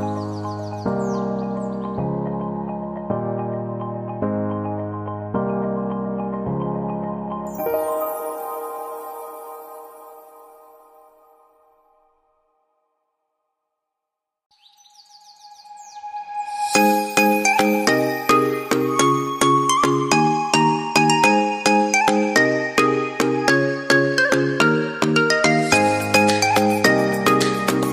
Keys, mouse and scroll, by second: 1.9 double click, 8.7 shift+click, 12.6 double click.